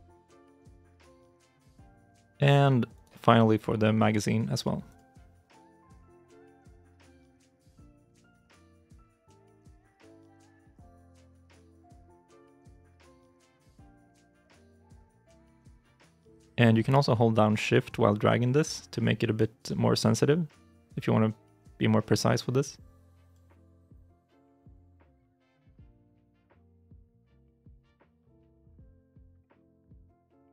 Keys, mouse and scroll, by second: 1.3 ctrl+z, 1.8 middle click, 2.1 shift+middle click, 2.8 right click, 2.8 shift+middle click, 7.5 double click, 8.2 middle click, 8.7 shift+middle click, 9.1 scroll up 1, 9.1 middle click, 11.3 middle click, 11.3-13.2 scroll up 1, 15.2 middle click, 16.3 shift+middle click, 26.4 ctrl+z, 27.6 ctrl+z, 28.6 shift+click.